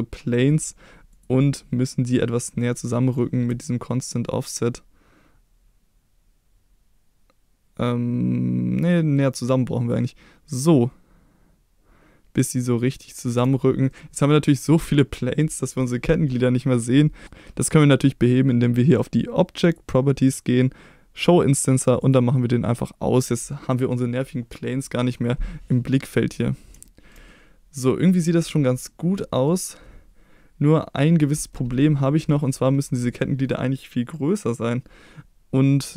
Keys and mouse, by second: 1.2 click, 3.7-13.4 shift+drag, 13.9-14.3 middle drag, 14.7-16.3 middle drag, 19.7 click, 22.0 click, 22.7 click, 23.5-23.9 middle drag, 26.8 shift+middle drag, 27.3-28.1 middle drag, 28.9-29.5 middle drag.